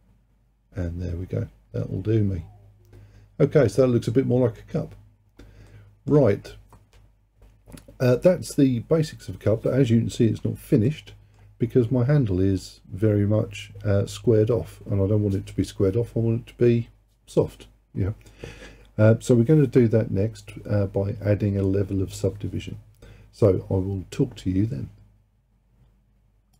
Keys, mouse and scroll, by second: 5.2-5.8 scroll down 2, 5.8-8.9 middle drag, 10.9-14.1 middle drag.